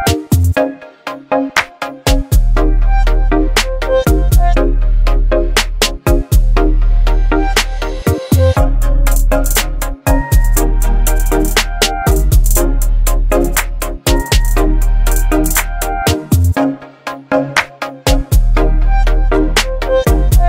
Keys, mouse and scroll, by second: 0.8-4.0 shift+drag, 4.5 Return, 6.8 ctrl+click, 7.7 ctrl+t, 10.5 ctrl+t, 10.5 click, 11.6 ctrl+click, 12.7 ctrl+t, 14.3 v, 14.6 ctrl+t, 16.9-20.4 shift+drag.